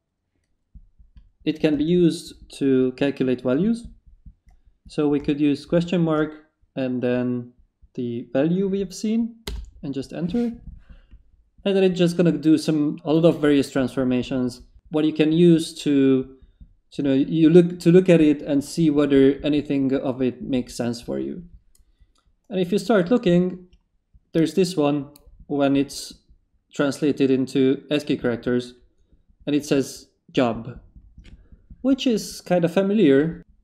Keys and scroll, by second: 1.7 space, 5.6 ctrl+shift+v, 9.4 Return.